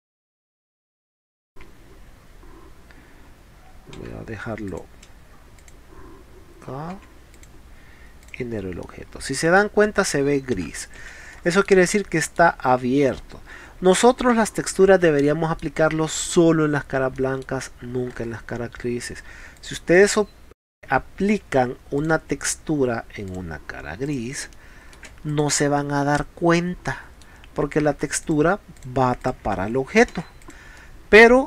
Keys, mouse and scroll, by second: 4.7 click, 5.6 click, 7.3 click, 7.3 p, 8.2 click, 8.8 middle click, 10.2 middle click, 11.3 middle click, 11.3 space, 11.9 middle click, 14.8 scroll up 4, 15.2-15.6 middle drag, 17.8 scroll down 2, 18.2 scroll up 2, 19.6 click, 20.0 click, 20.7 scroll up 2, 22.0 click, 23.3 click, 24.1 click, 24.6 middle click, 25.3 click, 25.3 space, 25.8-27.0 middle drag, 28.3 click, 28.8 click, 29.3 click, 30.2 middle click, 30.2 space, 30.5 click, 30.8 middle click.